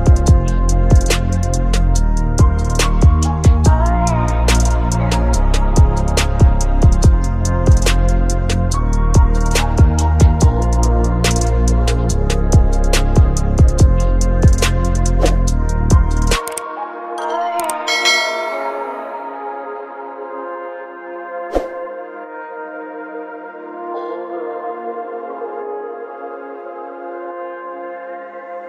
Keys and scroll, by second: 6.4 space, 26.0 space.